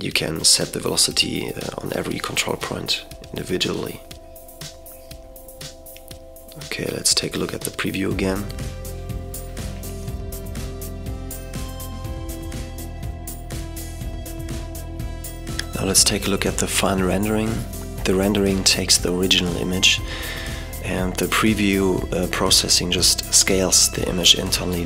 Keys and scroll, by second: 6.7 super+0.